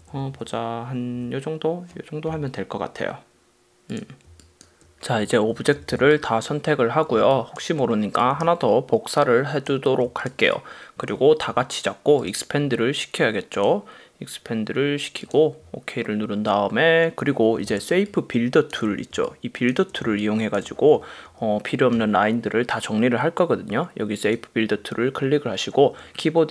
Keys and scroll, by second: 0.0 Up, 4.4 space, 5.4 super+;, 6.0 v, 7.5 space, 17.8 space, 18.3 super+space, 19.2 space.